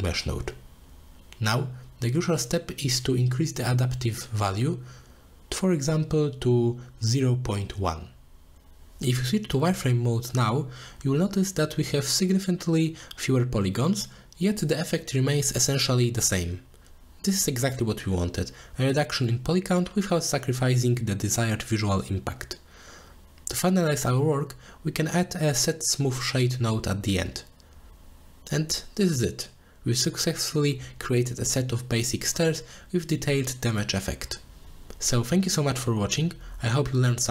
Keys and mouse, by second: 1.6 middle drag, 2.9-4.2 drag, 5.1 click, 5.9 g, 6.5-9.0 drag, 9.6 middle click, 10.0 z, 10.7 middle click, 11.0 click, 11.7-16.0 drag, 16.9 click, 17.1-17.6 middle drag, 17.9 z, 18.3-19.0 middle drag, 19.8 middle drag, 19.9 click, 20.2-21.9 middle drag, 22.4 click, 22.8 click, 23.5 shift+a, 25.6 o.